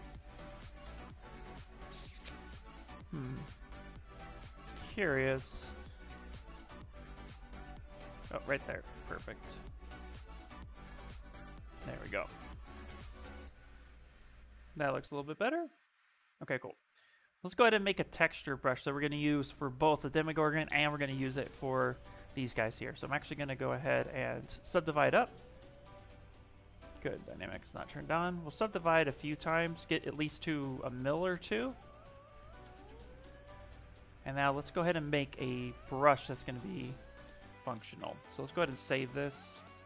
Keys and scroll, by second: 0.5 s, 2.3 shift+g, 3.2 Escape, 4.0 shift+f, 5.2 shift+f, 9.1 s, 22.3 ctrl+d, 23.6 shift+f, 24.1 shift+f, 29.3 ctrl+d, 31.1 shift+m, 32.9 shift+f, 33.8 s.